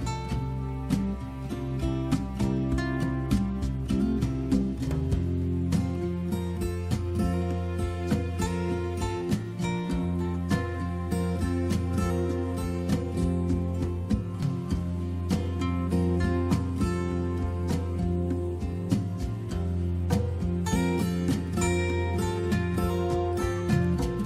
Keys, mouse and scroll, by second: 3.3 click, 3.5 click, 9.8 click, 12.2 click, 14.5 click, 18.9 click, 21.0 click.